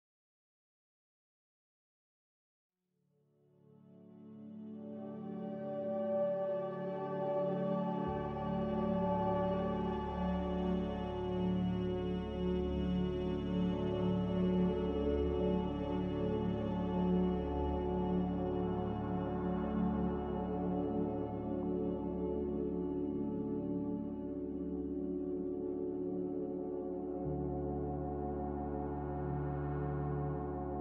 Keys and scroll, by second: 5.6 q, 13.5 Delete, 14.2 Delete, 17.2 Delete, 20.7 Delete, 23.2 Delete, 23.8 z, 26.5-27.4 typing, 27.5 Return.